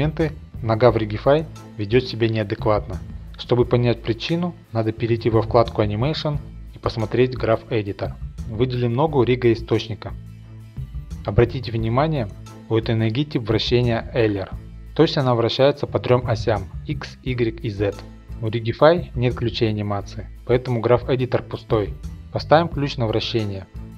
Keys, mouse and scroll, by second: 3.2-4.3 drag, 5.4 click, 6.8-8.5 drag, 7.7 scroll down 1, 8.5 scroll, 8.7 shift+middle click, 9.4 Home, 10.3 scroll down 1, 18.1-19.5 scroll down 1, 19.5 click, 19.5-21.2 scroll down 1, 23.7-23.9 drag.